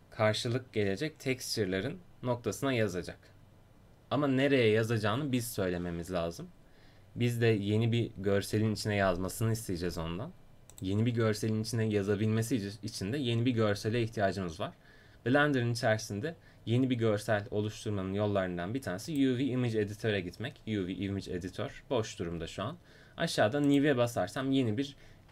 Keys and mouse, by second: 10.8-25.3 drag.